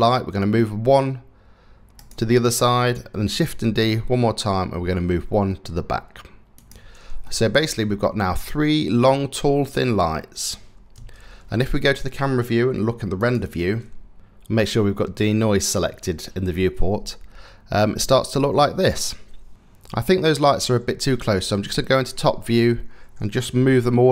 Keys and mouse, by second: 3.0 shift+d, 6.8-9.5 middle drag, 10.6 KP_0, 20.8 KP_7, 23.1 g.